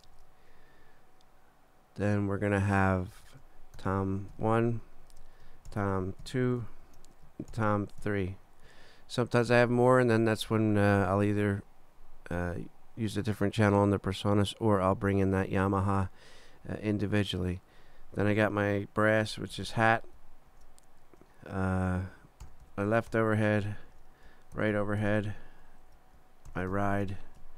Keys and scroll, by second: 0.1 super+Down, 3.8 shift+t, 4.3 shift+i, 4.9 shift+super+i, 5.1 super+Down, 5.7 shift+super+t, 6.2 shift+2, 6.9 super+Down, 7.5 shift+super+t, 8.0 shift+3, 8.7 shift+super+3, 9.5 super+Down, 19.0-20.2 typing, 20.2 super+t, 20.5 super+Down, 21.2 shift+super+Down, 22.2-23.6 typing, 23.6 shift+super+h, 23.9 shift+super+Down, 24.5 shift+super+r, 24.7 shift+o, 25.0 shift+h, 25.8 shift+super+Down, 26.5-27.3 typing, 27.4 super+e.